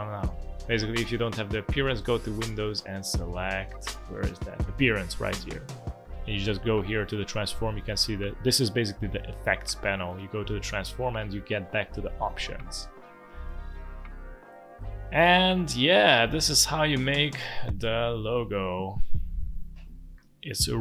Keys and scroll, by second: 5.4 Escape, 15.3 space, 16.3 alt+space, 17.7 z, 18.7 space.